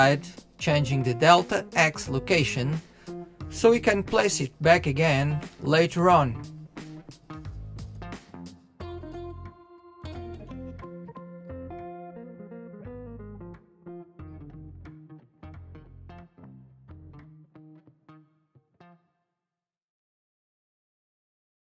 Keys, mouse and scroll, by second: 0.5 g, 5.4-6.8 drag, 17.8 click.